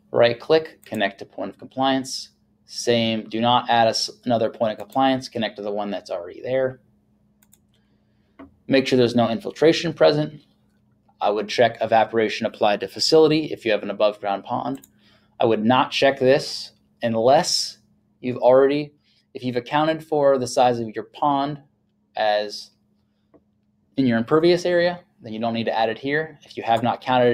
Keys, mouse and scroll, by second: 1.0 click, 4.8 click, 7.4 click, 14.8 click.